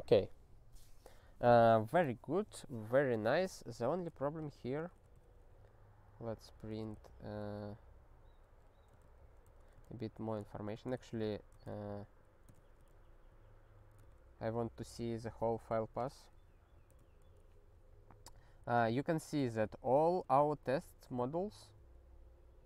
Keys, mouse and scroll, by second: 4.4 click, 4.8 ctrl+space, 4.9 ctrl+a, 5.1 alt+;, 6.3 click, 6.7 ctrl+space, 7.0 alt+b, 7.4 alt+b, 9.0 ctrl+f, 9.4 ctrl+w, 9.8 alt+f, 10.5 ctrl+alt+f, 11.7 ctrl+k, 12.6 ctrl+s, 12.8 ctrl+n, 13.0 ctrl+n, 13.3 ctrl+n, 14.0 ctrl+e, 16.5 ctrl+n, 16.9 ctrl+e.